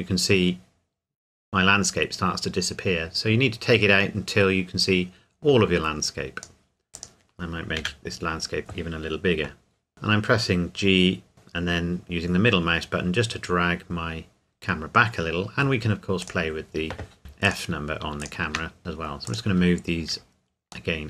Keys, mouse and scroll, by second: 7.8 s, 8.6 click, 9.9 middle click, 16.2 click, 17.5 shift+click, 18.8 g, 19.3 click, 19.6-20.9 scroll down 1.